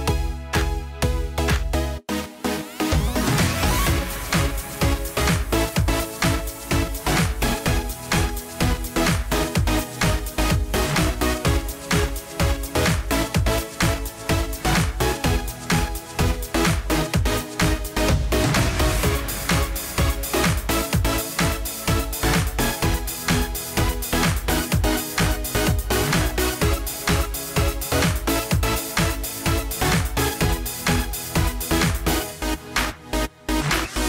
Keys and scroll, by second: 21.5 ctrl+g.